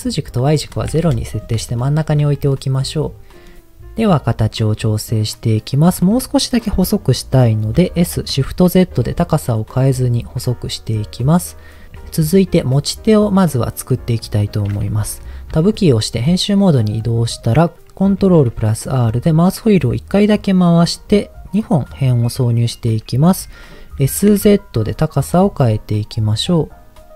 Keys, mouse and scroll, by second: 0.0-1.1 drag, 1.8 shift+middle click, 2.5 middle click, 3.3 click, 4.1-5.1 middle drag, 5.5 middle click, 7.7 s, 8.4 shift+z, 9.6 click, 9.9-11.0 middle drag, 11.2-11.9 scroll up 1, 13.2 middle click, 15.5 Tab, 16.6 middle click, 18.2 ctrl+r, 21.5-22.6 right drag, 22.7 middle click, 23.9 s, 24.3 z.